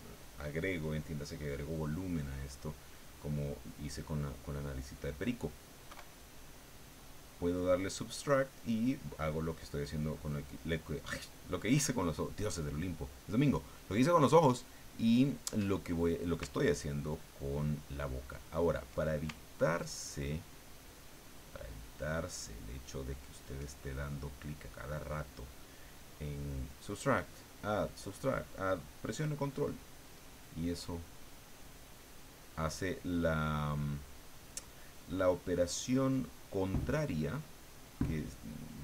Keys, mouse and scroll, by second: 3.3 click, 4.5-5.5 drag, 5.8 KP_1, 16.8-18.8 ctrl+drag, 19.3-23.5 ctrl+drag, 30.7 click, 31.6 click, 33.8-34.9 drag, 35.1-36.6 drag, 36.7-37.9 drag, 38.2 click.